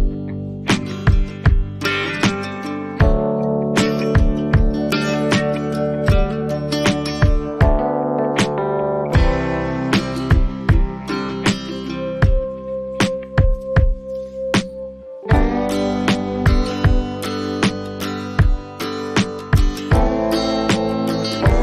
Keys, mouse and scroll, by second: 7.0 click, 11.8 click, 14.2 click, 16.2 click.